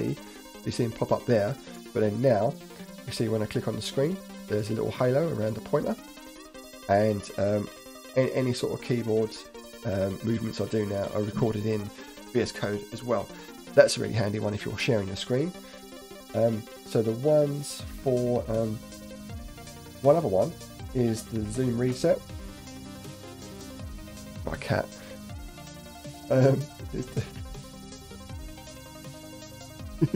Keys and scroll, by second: 7.8 Up, 8.0 Down, 8.2 Up, 10.4 Up, 10.6 Down, 10.8 Up, 10.9 Down, 11.0 Up.